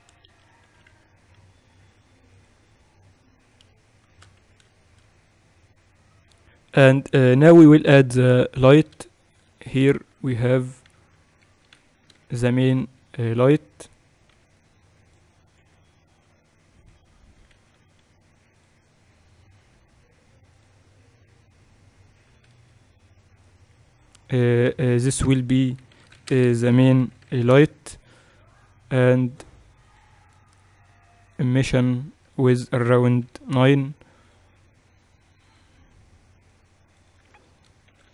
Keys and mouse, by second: 0.7 a, 0.9 a, 1.4 s, 4.2-7.1 middle drag, 6.3-8.5 drag, 8.5 KP_1, 10.4-12.1 drag, 10.7 shift+a, 12.4 Tab, 12.9 shift+a, 15.0 r, 16.3 g, 18.1 ctrl+1, 19.3-23.1 drag, 24.1-29.1 drag, 29.9-32.4 drag, 32.9-34.7 drag.